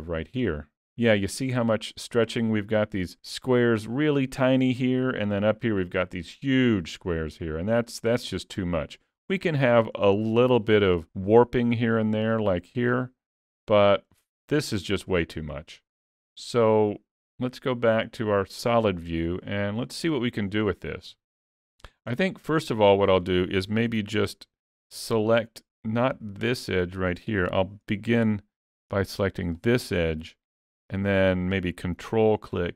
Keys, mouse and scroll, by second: 1.3 middle click, 4.7 middle click, 7.4-7.7 scroll down 2, 7.9 middle click, 9.1 middle click, 9.7 shift+middle click, 9.8 shift+middle click, 10.2 middle click, 13.0 shift+middle click, 13.6-14.8 scroll up 2, 13.9 middle click, 15.2 middle click, 15.4 shift+middle click, 18.1 click, 19.8-20.4 scroll down 2, 20.8 shift+middle click, 21.9 middle click, 23.9 2, 24.7 alt+click, 26.5 shift+click, 27.5 alt+a, 29.6 click, 30.2 middle click.